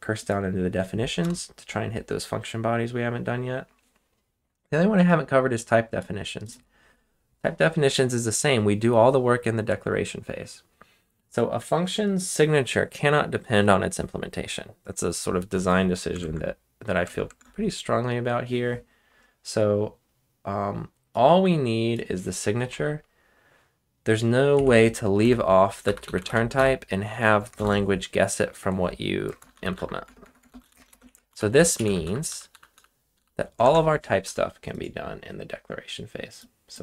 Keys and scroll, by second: 1.2 Return, 16.2 ctrl+Tab, 17.0 ctrl+Tab, 17.3 ctrl+Tab, 24.5 Escape, 25.2-27.6 typing, 29.2-33.6 typing, 33.6 ctrl+Tab.